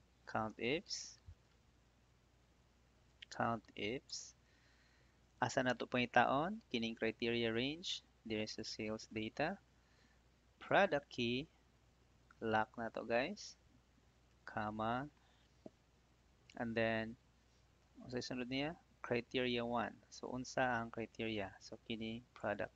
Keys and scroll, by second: 0.1 c, 4.0 Tab, 12.8 F4, 14.2 '.